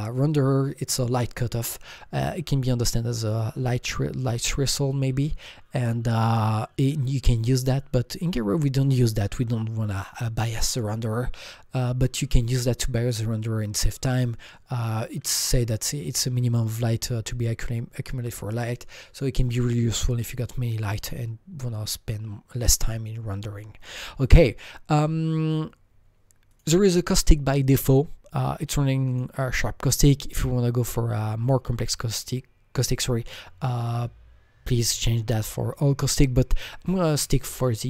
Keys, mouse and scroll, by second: 24.2 click, 26.5 click, 29.1 click, 29.2 click, 37.6 click.